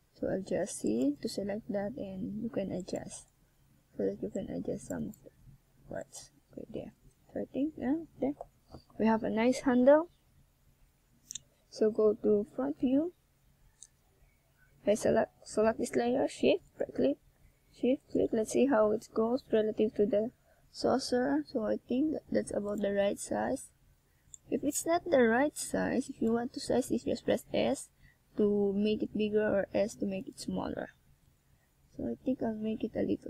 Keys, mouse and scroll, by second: 0.1 click, 0.3 Tab, 1.1 scroll down 1, 1.7 middle click, 2.8 z, 3.4 middle click, 5.0 KP_1, 6.8 Tab, 7.8 z, 8.5 a, 12.0 c, 14.8 b, 19.3 middle click, 23.3 z, 25.3 e, 25.7 click, 26.1 s, 27.8 click, 28.4 e, 28.7 click, 28.9 s, 29.6 click, 30.4 KP_1, 32.1 click, 32.8 z.